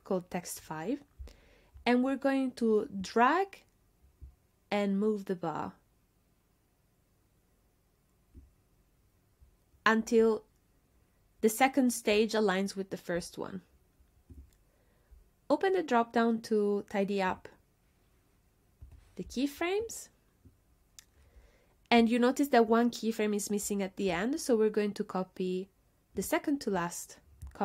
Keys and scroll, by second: 18.8 BackSpace.